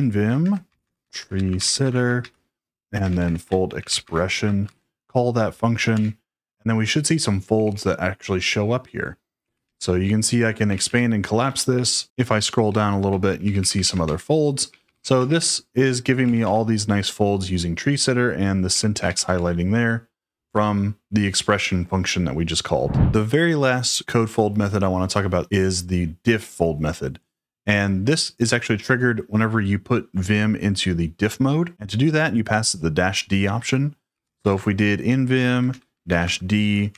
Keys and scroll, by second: 0.0-5.1 typing, 5.9 Return, 7.2-8.0 typing, 9.1-10.8 typing, 11.6 ctrl+d, 12.2 ctrl+d, 12.5 ctrl+d, 13.0-16.8 typing, 18.4-19.8 typing.